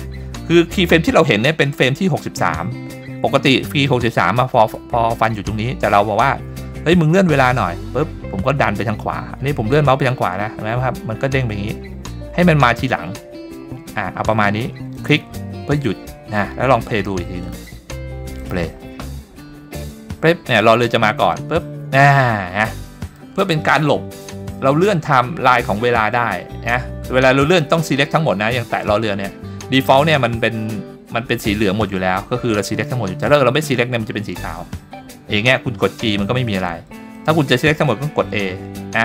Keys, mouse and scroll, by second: 17.4 click, 18.4 click, 23.1 click, 28.6 click, 33.2 click, 35.8 g, 37.1 click, 38.2 a.